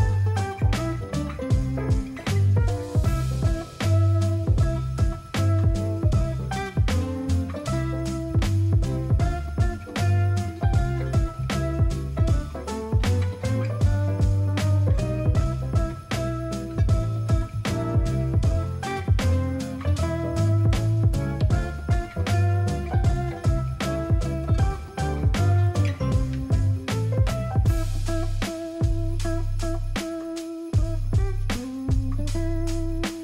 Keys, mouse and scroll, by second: 12.2 ctrl+a, 16.4 ctrl+d, 20.4 alt+click, 26.3 ctrl+a, 27.2 ctrl+d, 32.4 ctrl+a, 32.9 ctrl+d.